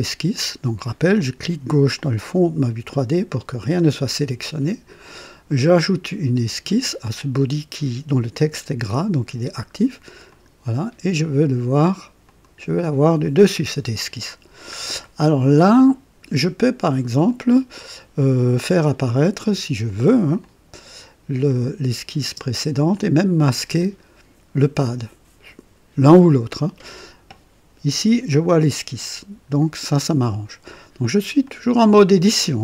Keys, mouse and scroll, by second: 1.9 click, 10.3 click, 12.2 click, 13.2 click, 14.3-14.7 scroll down 1, 15.0 right click, 17.2 click, 20.4 click, 21.5 click, 22.2 typing, 22.9 click, 23.6 typing, 31.4 click.